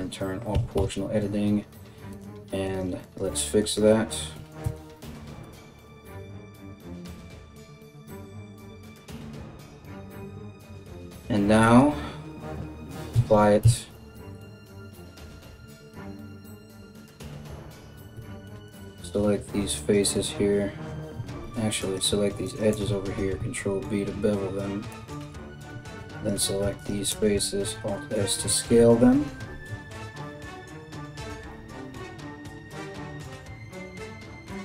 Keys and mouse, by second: 0.1 g, 2.3 right click, 2.4 middle click, 2.6 right click, 2.8 middle click, 3.2 right click, 3.3-6.1 middle drag, 3.9 g, 5.5-9.6 typing, 6.1 right click, 6.2 middle click, 6.7 right click, 6.9 middle click, 7.2 right click, 7.7 middle click, 7.9-9.0 right drag, 9.0 middle click, 9.2 right click, 9.3-21.4 middle drag, 10.1 Tab, 12.7 ctrl+a, 13.2 Tab, 14.5 KP_1, 17.8 3, 18.3 alt+right click, 19.3 alt+shift+right click, 20.7 2, 21.4 alt+right click, 21.6 alt+shift+middle click, 22.0 alt+shift+right click, 22.2-25.7 alt+shift+middle drag, 22.8 ctrl+b, 25.3 3, 25.7 alt+right click, 26.0 alt+shift+middle click, 26.4 alt+shift+right click, 26.5-34.6 alt+shift+middle drag, 27.1 alt+s.